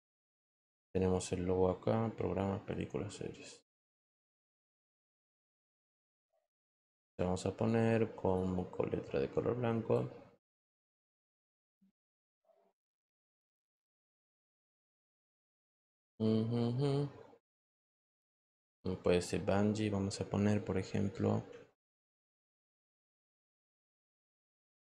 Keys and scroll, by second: 23.3-24.9 typing.